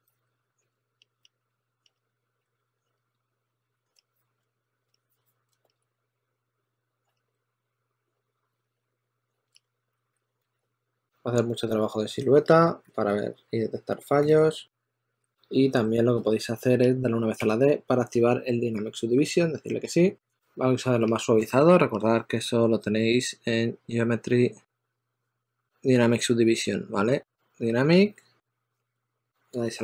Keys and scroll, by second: 0.0-17.2 typing, 20.8 s, 28.8 d, 29.1 d.